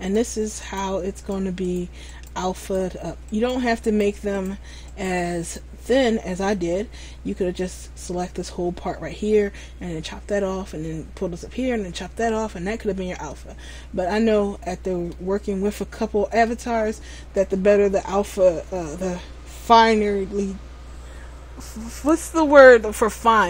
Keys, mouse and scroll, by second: 13.0-13.5 scroll down 1, 13.5 middle click, 17.5-19.1 scroll up 1.